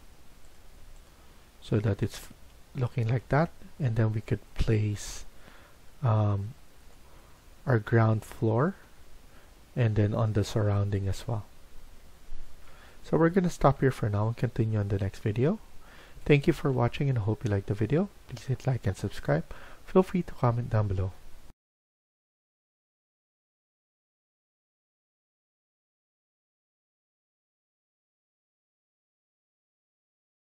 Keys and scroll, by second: 1.9 Escape, 2.2 Escape.